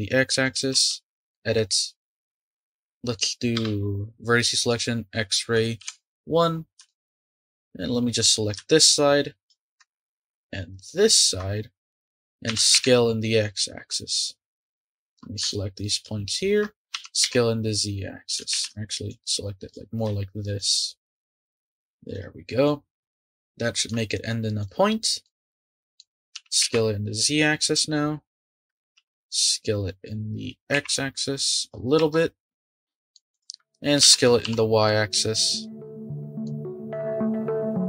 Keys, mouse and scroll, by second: 0.7 Tab, 1.3 middle click, 2.1 scroll up 1, 2.4-3.5 middle drag, 3.5 1, 4.6-5.8 drag, 5.8 KP_1, 6.5 scroll up 3, 6.8 shift+middle click, 7.1 click, 8.8-9.8 shift+drag, 12.5 s, 14.7 click, 15.9 shift+click, 16.9 s, 18.5 ctrl+z, 19.1 click, 20.5 shift+click, 21.4 Tab, 22.1 click, 22.6-24.2 middle drag, 24.2-24.6 scroll down 2, 24.6 drag, 25.2-26.3 middle drag, 26.3 s, 28.9 s, 32.0 Tab, 32.8-33.3 middle drag, 33.3 click, 34.0 s, 36.0-37.3 middle drag.